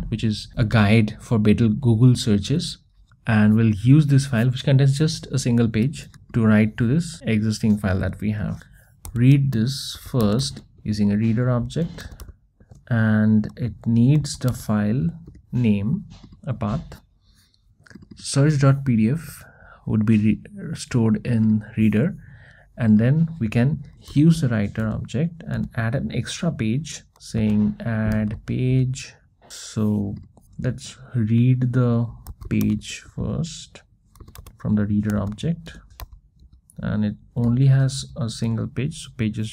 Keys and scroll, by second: 12.6 Return, 15.4 Return, 24.9 Return, 29.5 Return, 35.7 Return, 36.5 Return.